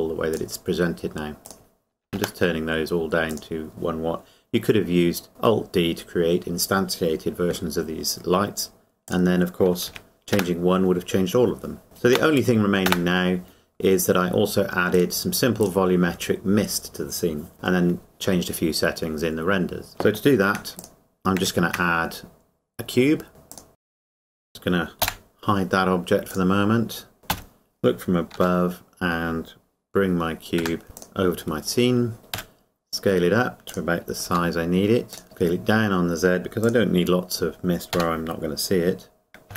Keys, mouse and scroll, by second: 0.3 click, 2.0 KP_1, 3.3 click, 9.1 click, 9.9 KP_1, 12.9 KP_0, 15.8 click, 19.9 middle click, 23.5 click, 23.8 click, 25.8 h, 27.3 KP_7, 29.9 g, 30.6 Escape, 30.8 g, 31.0 click, 31.5-32.2 scroll up 1, 32.3 s, 33.7 click, 34.3 g, 35.1 click, 35.1 click, 35.2 s, 36.6 click, 37.9 g.